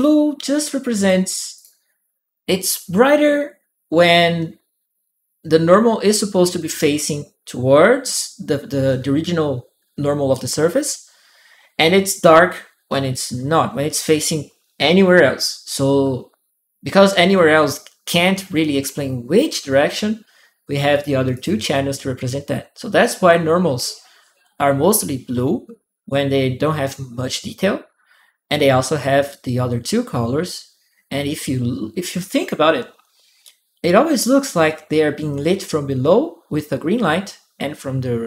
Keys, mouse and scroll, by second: 0.8 click, 1.3 click, 20.7 click, 21.1 click, 32.5 middle click, 32.5-33.7 scroll down 4, 33.7-34.5 scroll down 1.